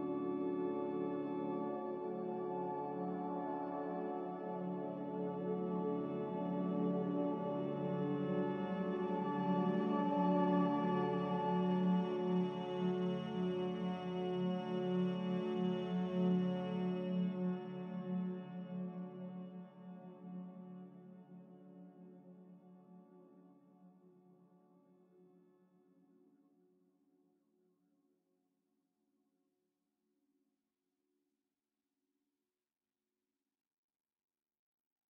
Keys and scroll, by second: 19.7 a, 26.4 5.